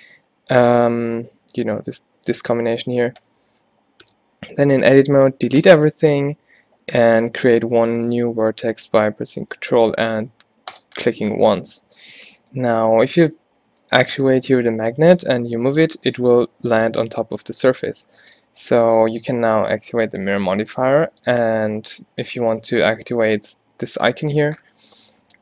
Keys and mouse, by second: 0.2 n, 1.7 alt+g, 4.2 Tab, 4.6 a, 5.1 a, 5.3 x, 12.7 middle click, 14.9 middle click, 15.1 g, 16.1-21.1 drag.